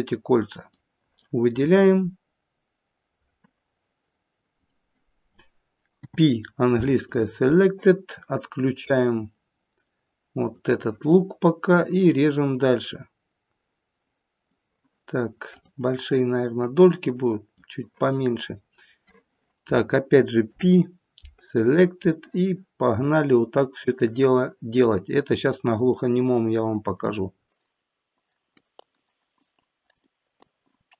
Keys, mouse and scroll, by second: 5.9 p, 10.4 click, 11.6 click, 15.4 click, 16.0 click, 20.5 p, 23.8 click, 24.8 click, 26.9 click, 27.7 click, 28.8 p, 29.3 click, 29.6 click, 30.4 p.